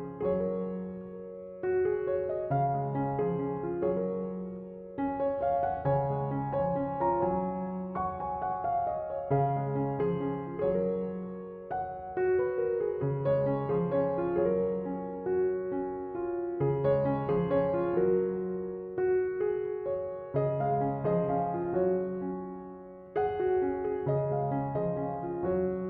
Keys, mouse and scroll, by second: 2.3-2.8 drag, 2.8-5.8 middle drag, 7.0-10.1 middle drag, 10.1 click, 10.7-12.2 drag, 12.2-15.2 middle drag, 17.1 click, 18.2 click, 19.8-20.6 scroll down 2, 20.6 click, 22.3-24.4 drag, 24.4-25.8 middle drag.